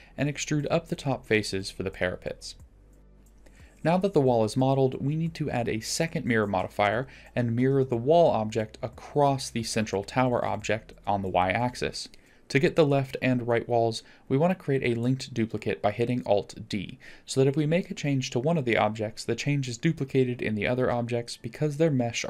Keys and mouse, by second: 0.1 shift+click, 0.3 middle click, 0.7 shift+click, 1.4 shift+click, 1.9 e, 3.1 middle click, 3.3 Tab, 3.7-4.3 middle drag, 4.5 middle drag, 5.0 middle click, 5.8-6.4 drag, 7.7 middle drag, 8.5-8.9 drag, 9.3 middle drag, 9.5 click, 10.1 middle click, 10.3-11.2 middle drag, 12.7 alt+d, 18.3 Tab, 19.5 g.